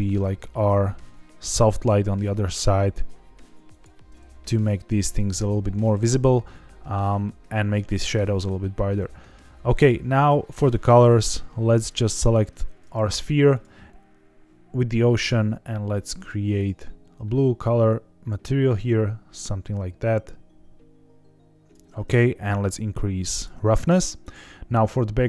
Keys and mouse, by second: 0.0 r, 0.2 z, 3.7 click, 11.7 click, 15.3 drag, 16.1 click, 22.6 click, 24.2 click.